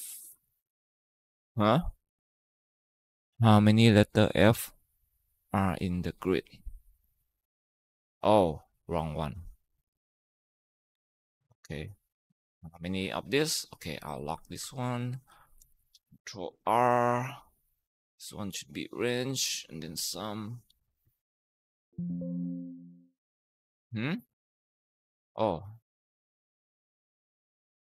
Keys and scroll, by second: 0.0-0.2 typing, 10.7 Tab, 13.8 F4, 14.4 Tab, 15.2 Left, 15.5 shift+Right, 16.3 ctrl+r, 19.9-21.2 typing, 21.9 Tab, 22.4 Return, 22.5 Return, 23.0 Up, 23.3 Right, 23.5 Down, 27.7 Return.